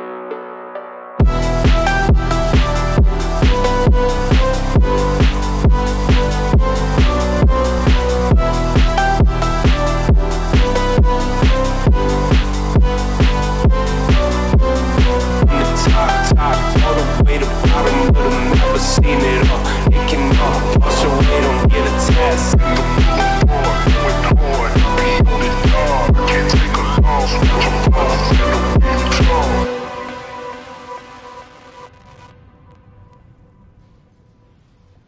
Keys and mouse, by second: 0.0-1.5 drag, 2.0-3.2 middle drag, 3.7 ctrl+z, 4.7 ctrl+r, 5.9 s, 7.9 s, 11.5 click, 12.1 shift+click, 13.1 click, 13.4 shift+click, 14.5 g, 16.3 g, 18.4 shift+click, 18.8 shift+click, 19.1 shift+click, 19.5 g, 20.7 g, 22.1 2, 23.2 g, 24.6 1, 24.9 click, 25.2 g, 26.2 click, 26.5 g, 27.6 click, 27.9 g, 29.1 click, 29.3 g, 30.6 `, 31.6 click, 32.1 g, 33.3 click, 33.7 `.